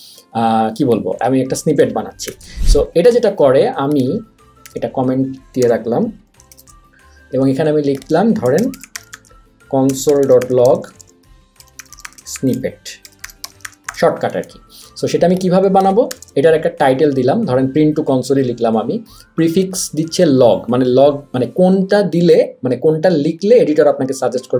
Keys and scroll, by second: 2.3 super+/, 4.6 shift+/, 5.6 BackSpace, 6.5 super+/, 8.2-14.4 typing, 16.1 BackSpace.